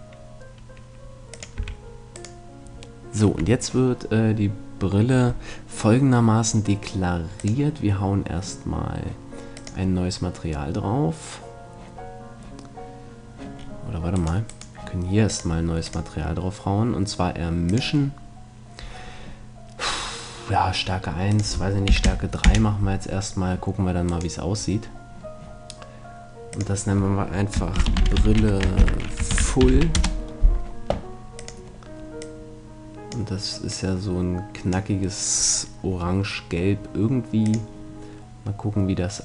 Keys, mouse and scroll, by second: 1.6-3.3 drag, 1.6 a, 2.3-4.0 right drag, 7.4-9.2 drag, 9.6-11.3 drag, 13.6 middle click, 14.2-16.5 right drag, 15.3-17.8 drag, 21.3-23.2 drag, 24.2-25.9 right drag, 24.7-26.6 middle drag, 26.6-28.3 drag, 31.4-33.2 drag, 37.4-39.2 drag.